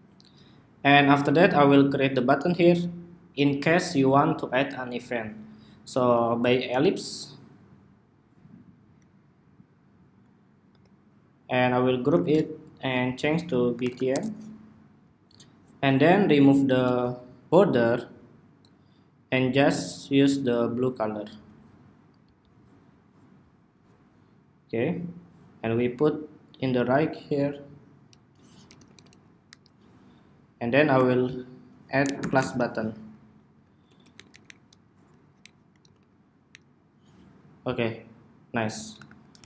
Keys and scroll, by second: 11.9 super+g, 28.5 alt+Left, 28.7 alt+Left, 28.9 alt+Left, 29.2 alt+Right, 32.3 ↺, 38.8 super+-, 39.2 super+=.